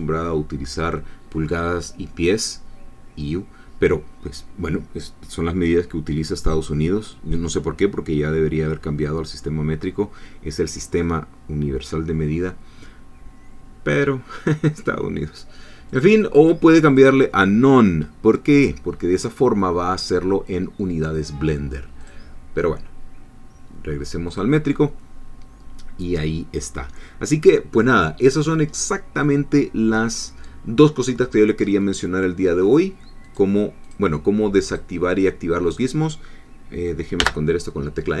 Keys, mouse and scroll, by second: 15.9 click, 16.9 click, 22.0 click, 24.3 click, 27.2-27.8 scroll down 1, 28.0-29.0 scroll up 1, 29.0-29.4 scroll up 1, 29.8-31.0 scroll down 1, 31.0-31.6 scroll up 1, 33.3 click, 34.6 click, 35.1 click, 37.2 n.